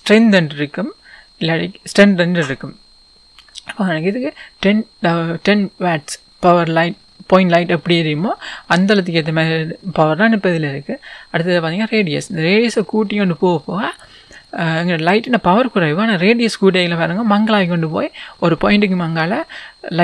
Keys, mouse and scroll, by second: 7.4-8.3 scroll up 1, 8.3-9.0 scroll down 1, 12.2-20.0 drag.